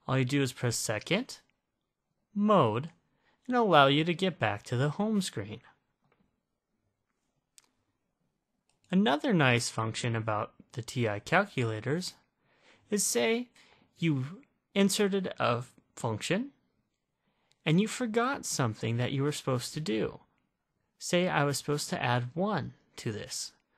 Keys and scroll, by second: 9.0 8, 11.1-12.5 typing, 15.4 (, 15.4 ).